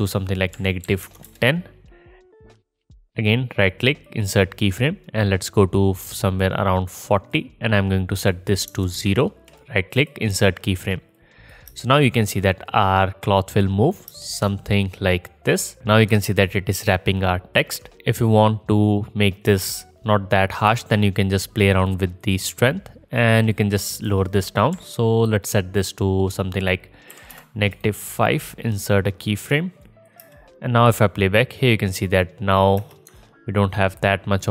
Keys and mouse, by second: 11.7 space, 14.1 space, 17.9 space, 19.5 space, 22.3-23.5 drag, 23.7 click, 30.2 space, 32.8 space.